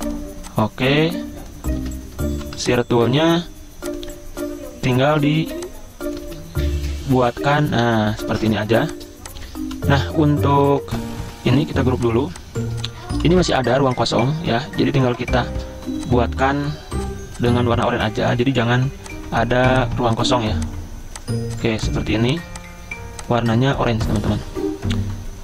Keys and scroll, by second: 1.9 ctrl+z, 2.3 v, 5.5 ctrl+z, 6.3 ctrl+z, 8.2-9.6 typing, 11.2 ctrl+g, 12.3 z, 13.2 v, 15.6 p.